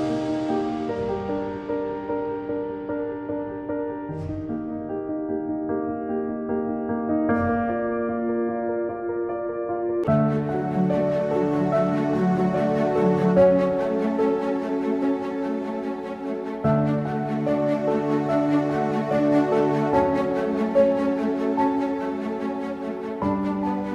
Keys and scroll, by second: 4.3-5.0 typing, 8.5-9.3 typing, 14.1-16.2 typing, 18.4 typing, 22.3 typing.